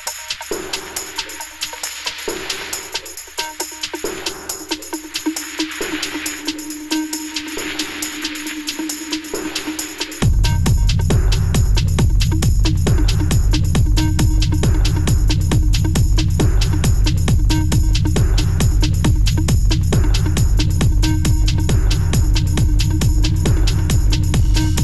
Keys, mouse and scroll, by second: 1.1 s, 3.0 s, 4.0-4.5 middle drag, 4.5-4.8 scroll down 2, 4.8-5.2 middle drag, 5.2-5.6 scroll up 1, 5.6 Tab, 6.2 3, 6.5 click, 6.7 middle click, 7.4 shift+click, 7.6-8.9 middle drag, 8.9 i, 10.5 e, 11.6-13.0 middle drag, 13.0 ctrl+z, 13.4 click, 14.6 e, 16.8 middle click, 17.6 click, 18.2 e, 20.0 middle click, 20.5 click, 21.3 middle click, 21.9 shift+click, 22.2 middle click, 22.5 ctrl+z, 22.6 ctrl+z, 22.8 ctrl+z, 23.0 ctrl+z, 23.3 ctrl+z, 23.5 ctrl+z, 24.0 middle click, 24.5 i.